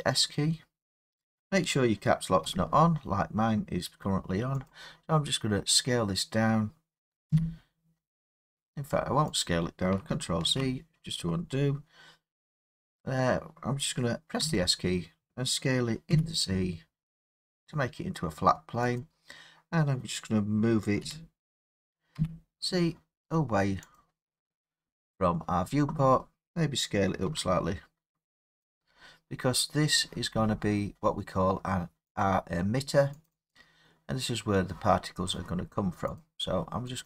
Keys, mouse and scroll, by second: 2.4 Caps_Lock, 4.7 click, 7.2 s, 9.4 click, 10.4 ctrl+z, 14.4 s, 16.0 z, 19.0 click, 21.0 g, 22.1 z, 23.9 click, 27.2 s, 28.7 click, 32.2 click, 33.2 click, 33.5 click, 36.1 click, 36.9 click.